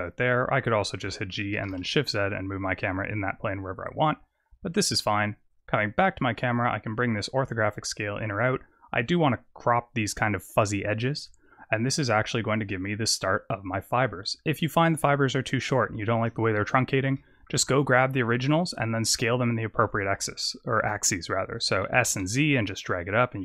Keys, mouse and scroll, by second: 1.0 g, 5.4 click, 6.3 click, 11.3-12.1 scroll up 3, 13.6-14.0 scroll down 6, 14.1-14.5 scroll up 4, 16.4-17.1 scroll down 8, 17.1 middle click, 17.6-18.3 scroll down 1, 18.3 scroll down 1, 18.5 click, 19.1 middle click, 21.8 s.